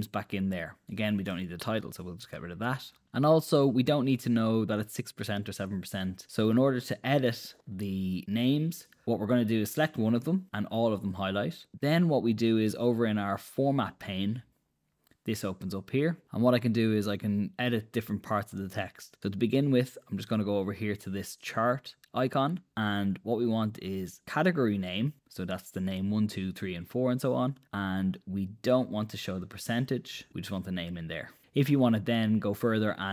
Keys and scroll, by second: 1.6 BackSpace.